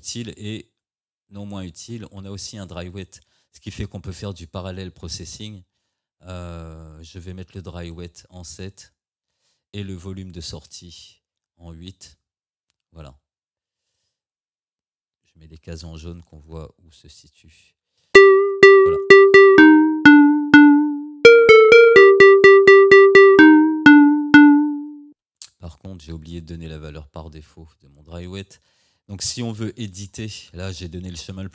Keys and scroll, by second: 18.2 space, 25.2 space.